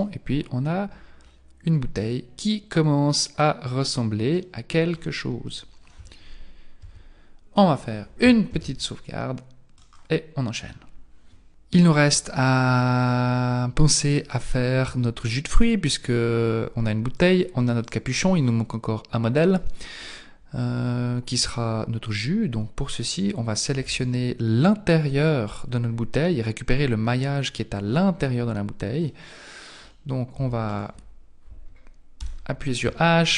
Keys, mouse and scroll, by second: 4.9-6.8 scroll down 4, 6.8-7.2 scroll down 2, 6.8 KP_1, 8.5 ctrl+s, 13.6-14.3 scroll up 4, 14.3 right click, 15.2-17.0 scroll up 2, 17.2 right click, 18.5 right click, 23.7 Tab, 28.5-29.1 scroll up 2, 29.1 middle click, 30.4 Tab, 30.7 right click, 32.2 h, 33.0 shift+middle click.